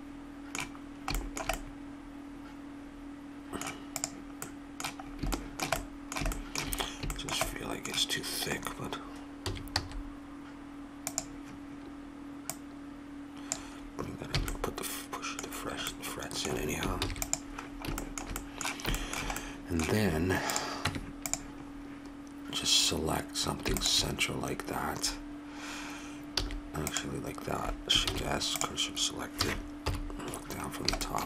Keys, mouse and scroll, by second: 3.9-5.6 drag, 5.6 middle click, 9.4 s, 12.4-14.0 drag, 14.4 a, 16.9 ctrl+s, 20.5 click, 20.8 Tab, 24.5 click, 25.5-26.9 middle drag, 26.4 a, 26.9-28.6 drag, 28.1 shift+s, 29.3 a, 29.8 KP_7, 30.7 middle click.